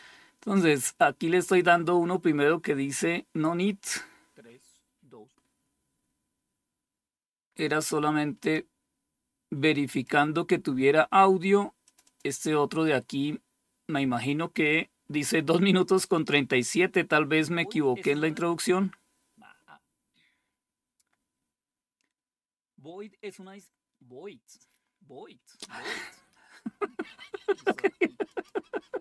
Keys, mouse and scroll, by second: 7.9 click, 9.3 click, 11.3 click, 27.8 click.